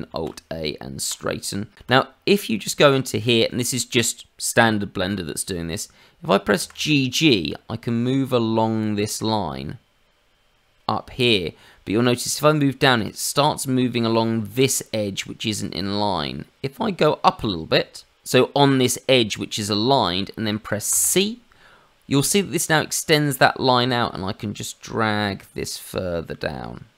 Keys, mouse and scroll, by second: 0.1 alt+a, 1.8 click, 2.2-2.8 scroll up 3, 2.8 shift+middle click, 6.5 g.